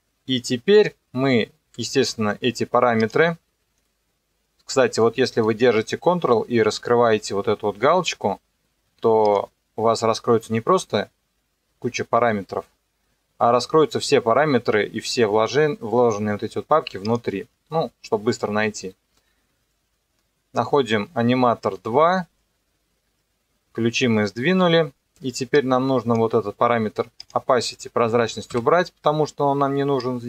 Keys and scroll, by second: 28.5 Delete.